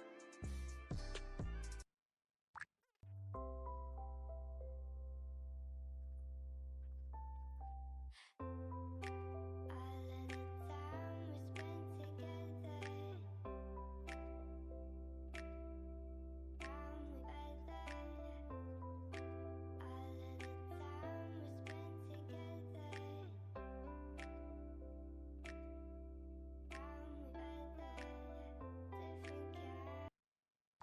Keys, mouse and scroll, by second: 0.2 click, 0.2 Escape, 1.3 click, 1.3 Escape, 1.9 click, 2.0 Escape, 3.4 click, 3.9 click, 4.1 Escape, 4.2-5.0 typing, 4.3 click, 6.3 click, 6.6 click, 6.7 click, 7.0 click, 7.5 Right, 7.7 -, 8.0 Return, 8.8 click, 9.1 click, 9.6 Escape, 9.8-10.6 typing, 9.8 click, 9.9 click, 10.7 shift+Return, 11.6 click, 12.7 click, 13.5 click, 13.7 click, 13.9 click, 14.5 click, 14.7 click, 15.1 click, 15.3 Escape, 15.6 click, 15.8 click, 16.3 click, 16.5 click, 17.9 click, 18.8 click, 20.3 click, 21.1 Escape, 22.5 click, 23.0 Delete, 24.0 click, 24.3 click, 27.2 click, 27.3 Escape, 27.5 click, 27.7 Delete, 28.0 Escape, 28.4 click, 29.1 click, 29.5 click, 30.5 click.